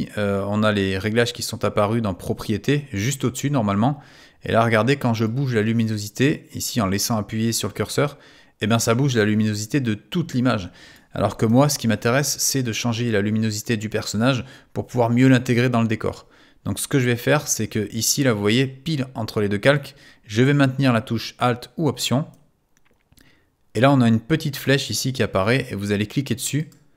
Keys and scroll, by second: 11.5 super+z.